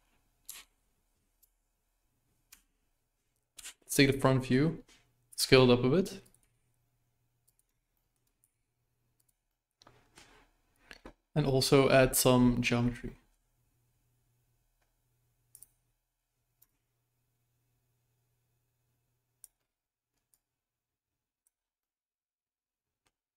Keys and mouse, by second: 0.4 KP_1, 1.4 BackSpace, 2.4 Tab, 3.5 KP_1, 5.3 s, 6.4 g, 7.9 shift+middle drag, 8.4 g, 9.4-10.2 middle drag, 15.5 click, 16.8-19.4 shift+drag, 20.4-21.4 drag, 21.8-23.0 middle drag.